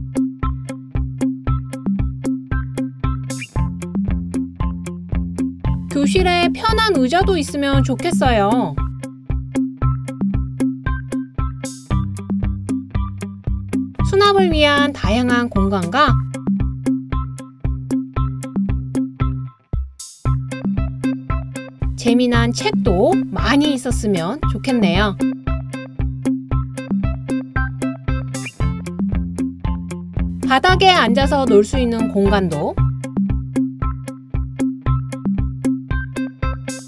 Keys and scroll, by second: 3.4 d, 20.4 super+d, 22.4 super+d, 22.6 super+d, 23.4 super+d, 29.9 super+c, 30.0 super+v.